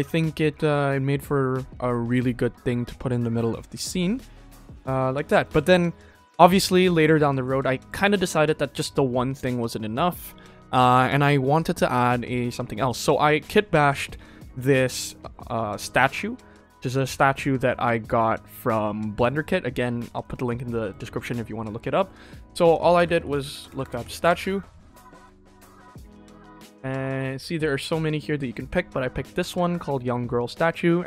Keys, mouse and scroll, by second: 0.1 ctrl+s, 0.4 shift+middle drag, 0.9-2.4 scroll down 1, 4.4 scroll up 3, 4.6-5.1 scroll down 4, 5.1 shift+middle drag, 5.6 ctrl+s, 5.7 scroll down 2, 6.0 middle drag, 6.5 shift+middle drag, 7.0 ctrl+s, 7.2 shift+middle click, 7.5 ctrl+middle drag, 8.0 shift+middle click, 8.8 ctrl+s, 12.8 click, 13.9 middle drag, 14.5-14.8 shift+middle drag, 15.3 middle click, 16.1 middle click, 16.5 shift+middle click, 17.3 ctrl+s, 17.5-19.1 middle drag, 19.3 scroll down 1, 19.7 shift+middle drag, 20.1 middle click, 20.7 shift+middle click, 21.2 ctrl+s, 22.4 click, 23.7 BackSpace, 23.8 BackSpace, 25.3 click.